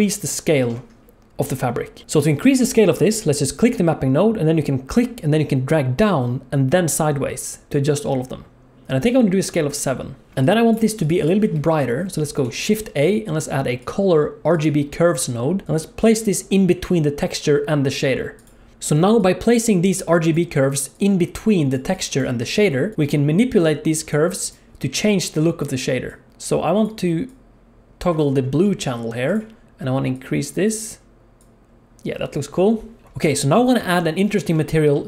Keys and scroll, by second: 10.7 g, 12.4 shift+a, 18.7-22.4 typing, 33.0 alt+a.